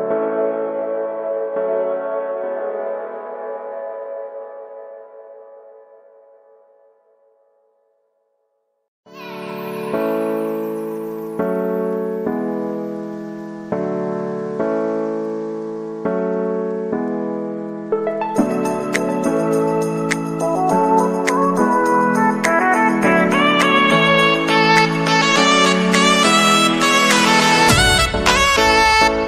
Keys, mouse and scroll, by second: 1.1 right click, 1.3 right click, 2.4 right click, 4.0 right click, 5.2 right click, 5.6 right click, 6.3 right click, 8.2 right click, 11.0 right click, 11.5 right click, 12.1 right click, 12.3 right click, 17.5 middle click, 17.7 right click, 17.8 middle click, 17.9 right click, 22.9 right click, 23.4 right click, 25.3 right click, 25.8 right click, 26.0 right click, 26.1 right click, 28.0 middle click, 28.1 right click.